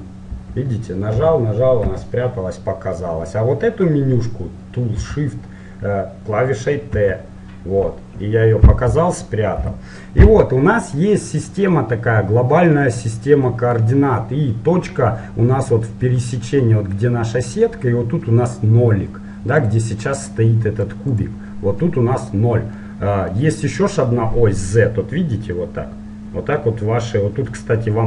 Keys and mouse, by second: 0.3 n, 1.1 n, 1.8 n, 5.1 t, 6.9 t, 9.7 n, 11.1-16.3 middle drag, 16.6-18.6 middle drag, 19.2 middle click, 19.7-22.9 right drag, 22.9-25.7 middle drag.